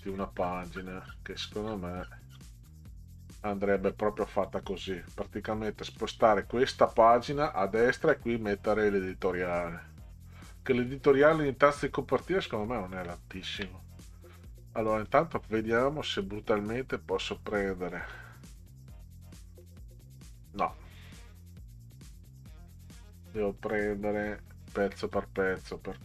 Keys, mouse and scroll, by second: 4.4 click, 6.0 click, 13.2 ctrl+scroll down 2, 15.1-17.9 drag, 20.4 click, 22.3 click, 22.7-23.0 drag, 25.0 click.